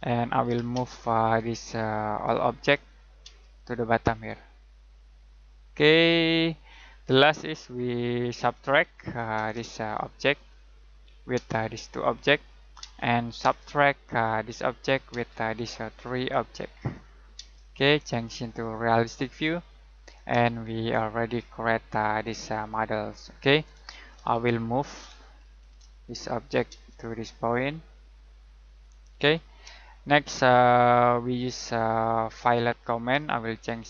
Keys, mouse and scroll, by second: 0.4 m, 0.7 space, 1.1 click, 3.2 space, 3.5 click, 7.0 middle click, 8.1-9.4 typing, 10.8 click, 11.3 space, 11.6 click, 12.8 space, 14.5 click, 15.1 space, 15.3 click, 17.3 space, 18.4 click, 20.7 middle click, 24.1 n, 24.9 Escape, 25.4 m, 25.6 space, 26.1 click, 26.7 space, 26.8 click, 29.3 middle click, 29.8 middle click, 30.6-31.9 scroll up 1, 31.9-32.4 scroll down 1, 32.4 middle click, 33.7 click.